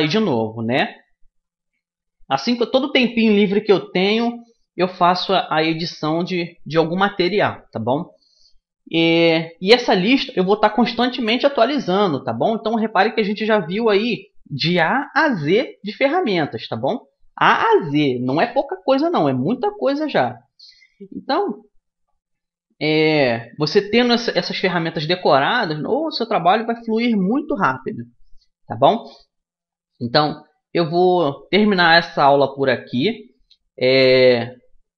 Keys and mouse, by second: 24.5-28.3 middle drag, 28.5-30.3 middle drag, 30.9-33.3 middle drag.